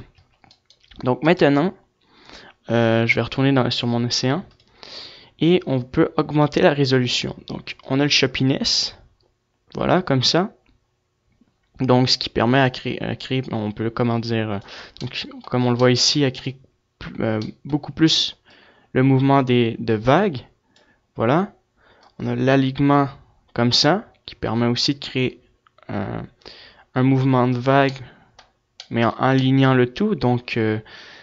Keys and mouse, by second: 2.4-5.4 drag, 5.4 right click, 6.9-13.0 drag, 6.9 right click, 13.9 middle click, 17.7-23.0 drag, 17.7 middle click, 17.7 right click, 26.8 middle click, 28.0-29.0 middle drag.